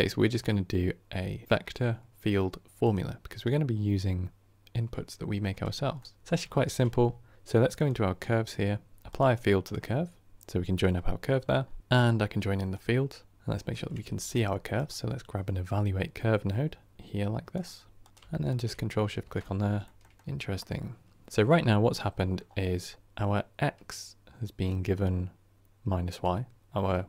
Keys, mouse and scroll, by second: 18.4 ctrl+shift+click, 19.3-19.7 scroll down 3, 19.7-20.1 shift+middle drag, 20.1 scroll down 1, 20.2-27.0 middle drag.